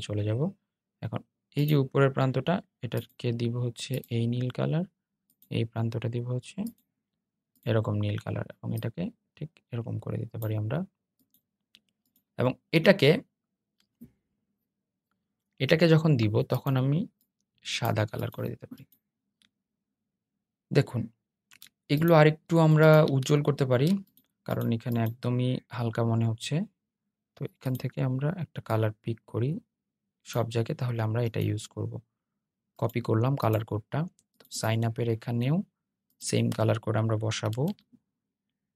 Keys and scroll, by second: 36.6 super+v.